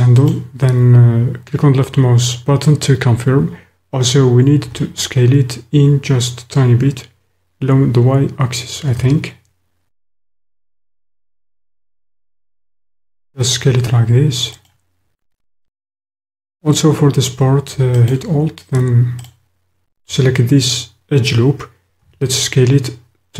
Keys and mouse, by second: 0.2 click, 4.6 s, 14.7 click, 18.0 alt+click, 19.2 alt+click, 22.0 s.